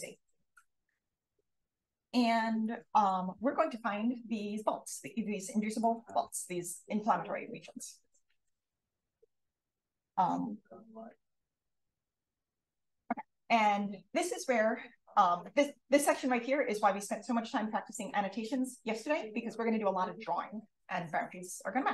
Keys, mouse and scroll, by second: 2.6-3.2 drag, 5.0-5.3 drag, 5.7 click, 9.6 click.